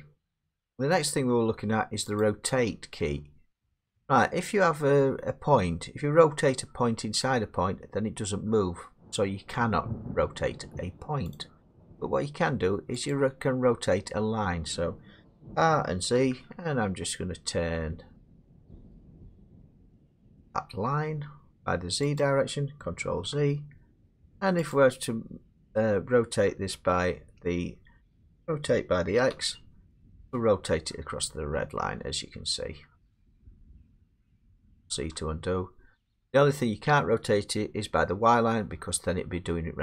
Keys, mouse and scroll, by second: 3.7 click, 11.4 click, 13.1 click, 15.4 r, 16.2 z, 22.2 click, 23.1 ctrl+z, 28.4-29.3 typing, 34.3 click, 35.0 ctrl+z.